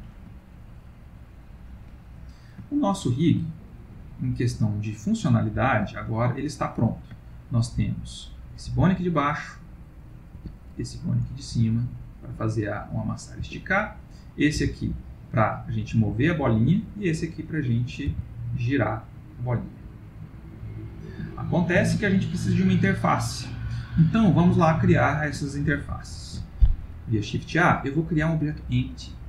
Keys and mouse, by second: 0.0 ctrl+middle click, 0.4 ctrl+middle click, 0.4 middle click, 0.8 middle click, 2.7 middle click, 2.8 ctrl+middle click, 5.6 ctrl+s, 6.1 middle click, 7.1 ctrl+middle click, 8.0 click, 8.7 g, 11.0 click, 11.6 g, 14.1 click, 14.7 g, 17.4 click, 18.2 r, 22.0 middle click, 25.4 shift+middle click, 26.2 shift+a.